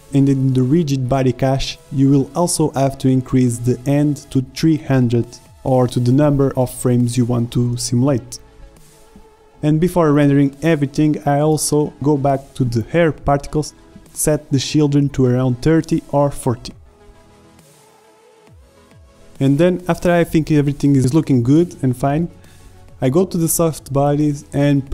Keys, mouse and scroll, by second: 0.0 click, 0.1-5.9 drag, 4.3 KP_0, 6.7 drag, 8.9 shift+z, 11.2 z, 16.2 shift+z, 24.8 shift+Left.